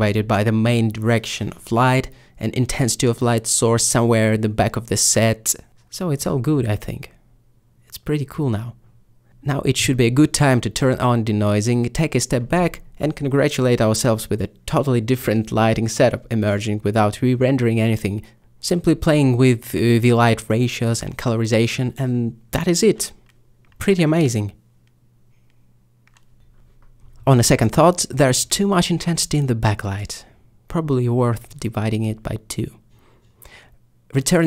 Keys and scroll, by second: 0.0-0.1 typing, 4.2 m, 5.2 m, 29.3 7, 34.3 ctrl+space.